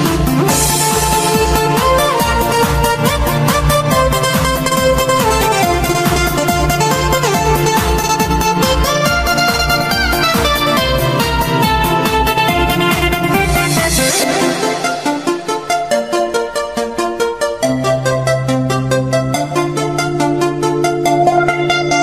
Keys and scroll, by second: 0.8 ctrl+g, 1.0 j, 3.4 shift+s, 3.5 ctrl+shift+g, 9.9 ctrl+z, 11.8 shift+p, 12.1 ctrl+z, 12.3 Delete, 12.5 v, 13.1 s, 13.6 p, 16.1 Right, 18.4 g, 19.1 ctrl+s, 20.0 p.